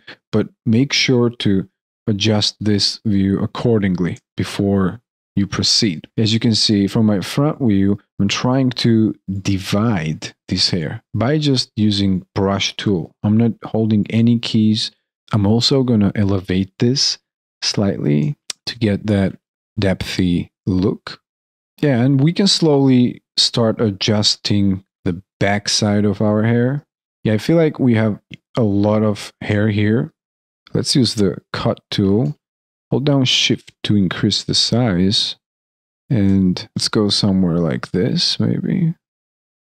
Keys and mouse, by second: 0.0 alt+click, 1.1 alt+middle click, 1.5 alt+click, 2.1 alt+middle click, 2.6 alt+click, 4.2 alt+middle click, 6.1 shift+right click, 14.0 alt+click, 19.1 alt+click, 21.2 alt+click, 21.4 alt+middle click, 21.6 alt+right click, 22.3 alt+right click, 22.4 alt+click, 22.5 alt+middle click, 22.6 alt+click, 22.7 alt+right click, 22.9 alt+click, 23.0 alt+middle click, 23.1 alt+click, 24.1 alt+click, 25.1 alt+click, 29.6 alt+middle click, 29.9 alt+right click, 30.3 alt+middle click, 31.5 alt+middle click, 33.5 alt+right click, 34.0 alt+middle click, 36.1 alt+middle click, 36.3 alt+click, 36.7 alt+middle click, 36.7 alt+right click, 39.5 alt+right click, 39.5 alt+click, 39.7 alt+middle click.